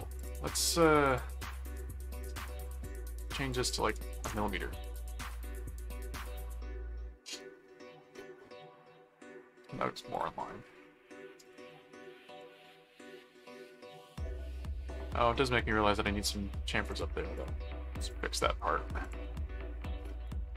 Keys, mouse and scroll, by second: 0.2 click, 0.6 right click, 1.1 click, 2.6 click, 3.2 click, 5.7-8.0 middle drag, 8.1-10.0 middle drag, 10.1 click, 10.5 middle click, 11.4 ctrl+click, 11.9 ctrl+s, 12.3 ctrl+Tab, 13.6-14.9 middle drag, 15.5-16.6 middle drag, 16.9 click, 18.0 click, 19.0 click, 20.3 click, 20.4-20.5 typing.